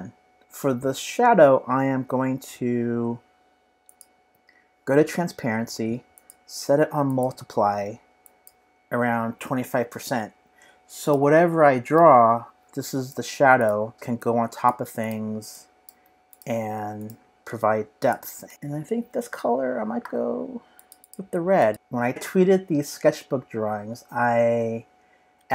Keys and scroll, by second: 9.5-10.4 typing, 13.9 v, 17.3 BackSpace, 18.4 BackSpace, 21.7 super+Tab, 24.1 super+Tab, 25.4 super+Tab.